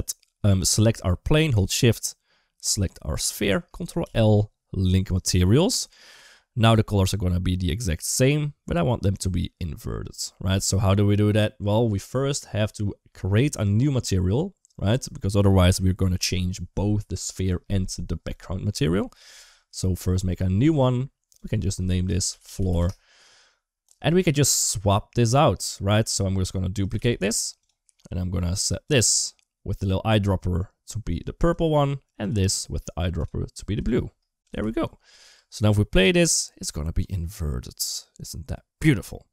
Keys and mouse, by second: 2.5 shift+click, 3.8 ctrl+l, 5.8 click, 6.0 space, 10.3 space, 13.0-14.1 middle drag, 20.5 click, 21.2-22.6 drag, 22.4 o, 26.1 middle drag, 26.5 click, 26.8 shift+d, 27.7 middle click, 28.6 click, 31.4 typing, 32.0 click, 34.2 click, 34.4 ctrl+x, 35.2 space.